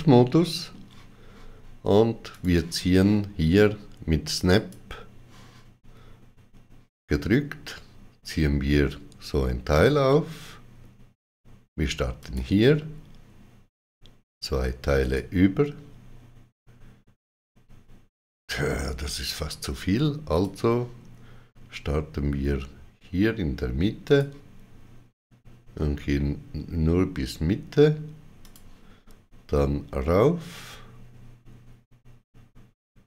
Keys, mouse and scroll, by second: 2.2 click, 4.4 click, 12.1 click, 14.9 click, 20.2 click, 23.9 click, 28.3 click.